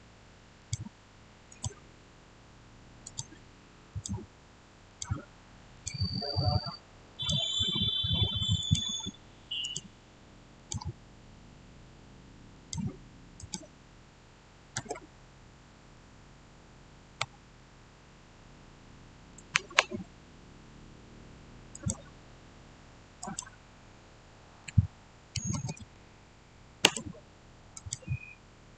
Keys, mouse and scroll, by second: 12.4 click, 14.7 Return, 15.4-21.6 middle drag, 21.6 click, 24.5-25.7 typing, 26.7 Return, 27.6 click.